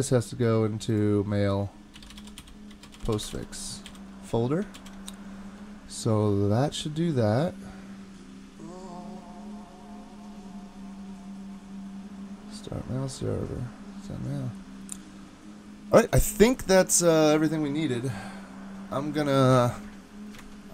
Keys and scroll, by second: 1.7-3.9 typing, 4.8 super+s, 20.4 super+Tab.